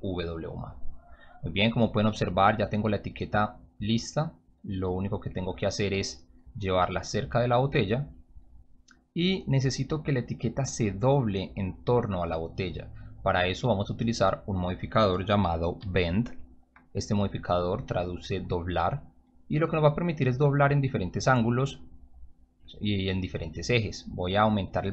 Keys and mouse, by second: 1.9 p, 5.3 click, 7.0-8.2 drag, 10.2-11.4 drag, 14.1 click, 15.8 b, 16.8 click, 19.5 click, 24.5-24.9 drag.